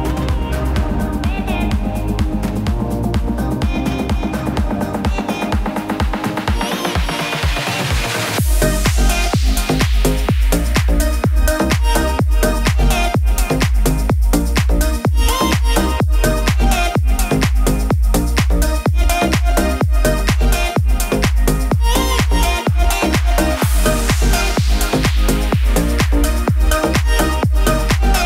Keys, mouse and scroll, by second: 12.4 click, 15.2 p, 16.5-18.7 drag, 19.1-25.0 drag.